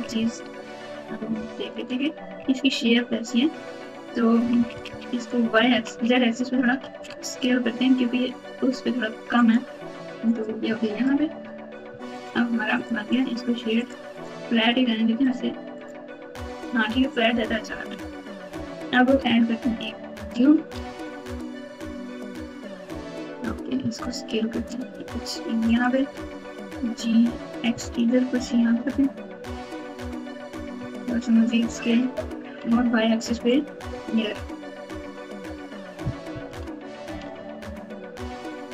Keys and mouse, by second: 0.0 KP_2, 0.1 KP_2, 1.5 KP_Subtract, 2.3 KP_2, 3.5-6.6 typing, 10.2 click, 10.6 Tab, 11.0 Tab, 11.4 Tab, 11.8 Tab, 12.1 click, 12.7 click, 13.0 right click, 14.1-15.3 right drag, 15.8 right click, 17.6 KP_7, 20.1 shift+a, 23.7 s, 26.3 g, 30.7 s, 32.6 Tab, 34.1 ctrl+r, 37.2 alt+z.